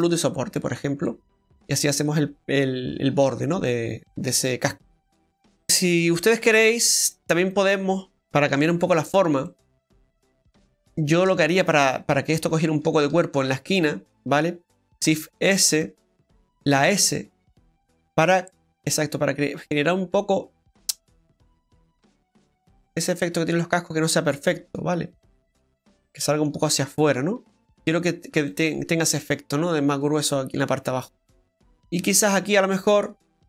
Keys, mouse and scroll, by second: 0.7-1.1 scroll down 2, 1.1 middle click, 2.8-3.5 scroll down 4, 5.6 click, 8.5 Tab, 8.9-9.2 scroll up 1, 9.5 middle click, 9.5-10.3 scroll up 2, 10.9 shift+middle click, 12.3 right click, 12.8 alt+shift+right click, 13.7 middle click, 15.0 shift+s, 16.7 s, 23.5 scroll down 1, 23.7 middle click, 26.7 middle click, 26.7 scroll down 1, 27.5 scroll down 4, 27.5 middle click, 27.5 scroll up 9, 27.8 Tab, 28.1-28.4 scroll down 2, 28.5 middle click, 31.0 middle click, 32.0 Tab.